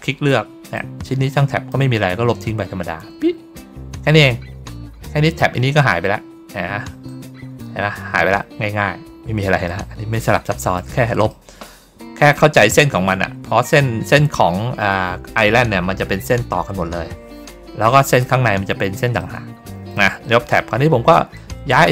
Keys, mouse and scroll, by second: 0.6 click, 5.1 click, 7.0 click, 8.6 ctrl+middle click, 9.5 middle click, 10.3 middle click, 11.2 middle click, 12.1 ctrl+middle click, 13.0 ctrl+middle click, 19.1 middle click, 20.1 middle click, 21.2-21.9 drag.